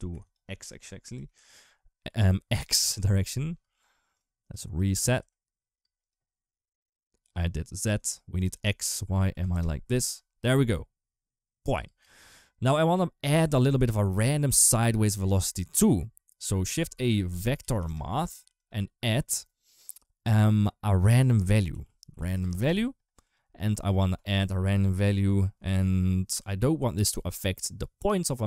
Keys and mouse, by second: 0.1-2.6 drag, 2.8 space, 3.4 space, 4.0 click, 4.5 click, 4.9 space, 5.6 space, 7.0 click, 8.3-9.3 drag, 9.7 space, 11.6 space, 15.9 click, 16.6 shift+a, 21.2-23.0 drag.